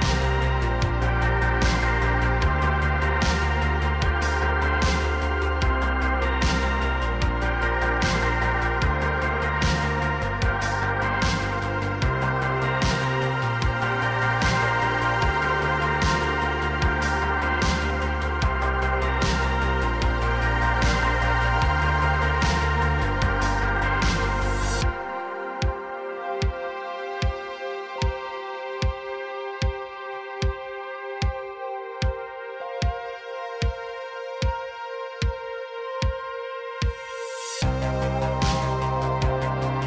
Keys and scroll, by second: 7.1 c, 8.9 c, 10.3 c, 13.1 c, 15.7 c, 16.9 c, 17.6 c, 18.8 c, 21.5 c, 23.2 c, 31.7-34.0 typing, 35.2 ctrl+z, 36.3-39.8 typing.